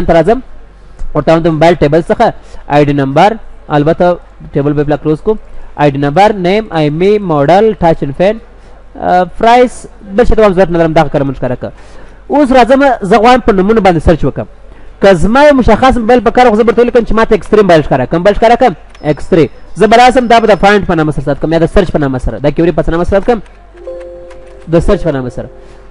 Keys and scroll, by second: 18.3 ctrl+s.